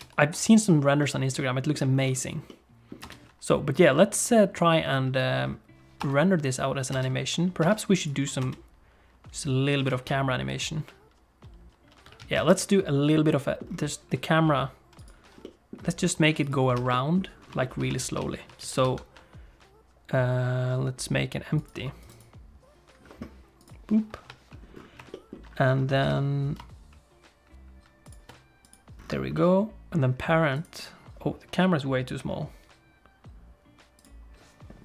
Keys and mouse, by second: 0.0 ctrl+space, 1.0 middle click, 2.5 middle click, 3.1 space, 3.7 click, 4.9 click, 6.0 KP_0, 6.9 space, 7.6 space, 8.0 click, 8.4 space, 12.5 alt+shift+space, 13.2 middle click, 15.4 middle click, 16.4 click, 16.8 ctrl+s, 16.9 middle click, 17.6 shift+middle click, 18.0 shift+a, 18.6 shift+c, 18.8 shift+a, 22.1-23.8 right drag, 24.1 KP_7, 25.1 shift+click, 26.0 g, 28.6 click, 29.3 middle click, 30.5 click.